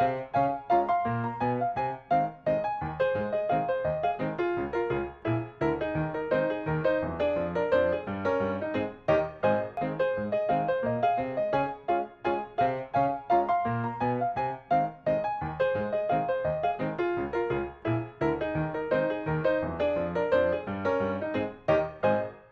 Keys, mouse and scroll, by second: 0.3 middle click, 1.2 click, 2.2 ctrl+click, 3.3 ctrl+click, 3.7 shift+middle click, 5.2 click, 6.5 ctrl+click, 7.2 ctrl+click, 7.7 middle click, 8.4 click, 8.9 shift+middle click, 10.0 ctrl+click, 11.7 click, 11.9 middle click, 12.4-12.8 scroll down 1, 12.8 middle click, 14.0-14.5 scroll down 1, 14.5 click, 14.9 middle click, 15.4 g, 15.6-15.9 scroll up 1, 15.9 click, 18.4-19.9 middle drag, 20.2 scroll down 1, 20.6 middle click.